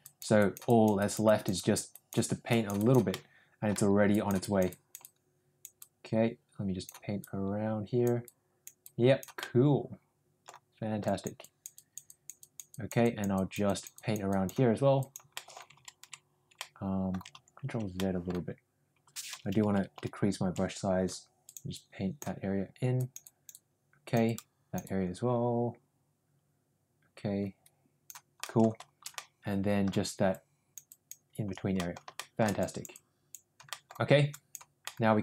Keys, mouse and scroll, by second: 0.0 click, 0.3 click, 0.6 click, 0.9 click, 1.2 click, 1.5 click, 1.9 click, 2.4 click, 2.7 click, 3.0 middle click, 4.0 click, 4.3 click, 4.6 click, 4.9 click, 5.7-6.8 drag, 7.1 click, 8.2 click, 8.8 click, 9.3-10.4 middle drag, 11.0 click, 11.4 click, 11.7 click, 12.0 click, 12.3 click, 12.7 click, 13.0 click, 13.3 click, 13.6 click, 13.9 click, 14.2 click, 14.9 click, 15.3 middle click, 16.0 ctrl+z, 16.5 middle click, 17.9 middle click, 19.5 ], 19.9 [, 20.4 [, 20.4 [, 21.4 click, 21.7 click, 22.9 click, 23.2 click, 23.5 click, 24.2-28.0 drag, 28.3 middle click, 29.1 middle click, 30.2 click, 30.8 click, 31.7 middle click, 32.1 shift+middle click, 32.5 click, 32.8 click, 33.6 middle click, 34.2 click, 34.7 middle click.